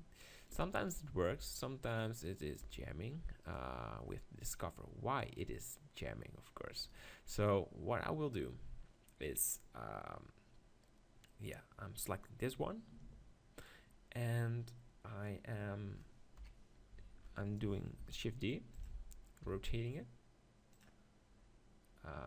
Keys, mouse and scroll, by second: 0.4 middle click, 1.0-4.2 right drag, 1.3 g, 2.6 g, 4.2-5.8 middle drag, 6.9-8.7 right drag, 7.5-8.6 drag, 8.7 middle click, 8.8-10.1 drag, 16.4 KP_1, 18.0 shift+d, 19.4 r, 21.4-22.2 middle drag.